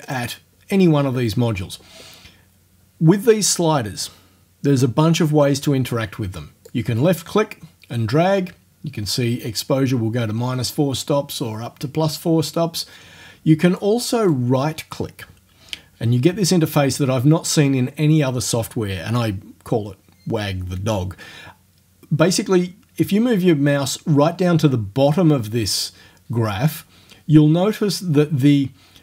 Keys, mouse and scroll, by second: 0.1 click, 6.7-14.0 drag, 14.3 right click.